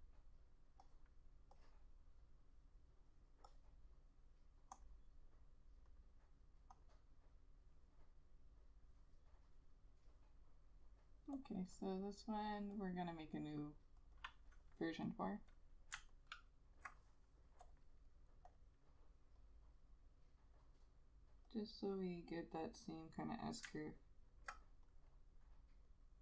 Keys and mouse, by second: 14.3 double click, 16.2 alt+click, 23.9 alt+click.